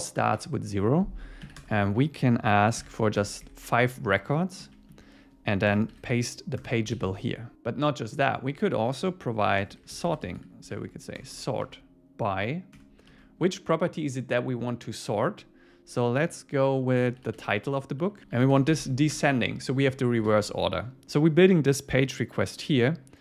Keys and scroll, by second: 3.2 Escape, 4.6 Down, 6.6 Return, 7.0 super+s, 9.0 Left, 12.8 Return, 18.0 Right, 19.2 Return, 20.3 super+s.